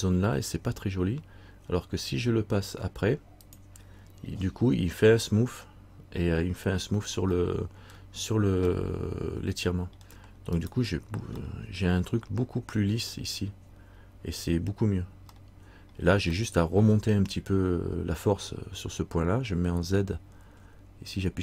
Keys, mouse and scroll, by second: 3.6 click, 7.5 middle click, 8.9 middle click, 10.7 right click, 11.6 middle click, 14.8 scroll down 1, 15.5 middle click, 16.5 middle click, 20.6 z.